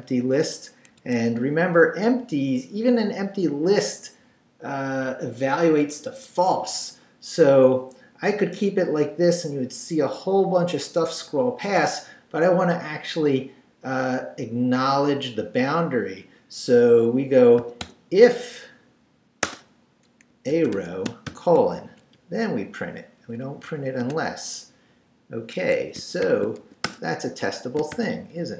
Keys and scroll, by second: 1.0 Escape, 1.4 o, 17.4-18.3 typing, 19.4-21.3 typing, 21.8 shift+Down, 22.1 Left, 23.3 Left, 23.6 Right, 24.0 Tab, 25.5 Escape, 26.2 shift+;, 26.6 shift+w, 26.8 Return, 27.8 shift+Return, 27.9 shift+;.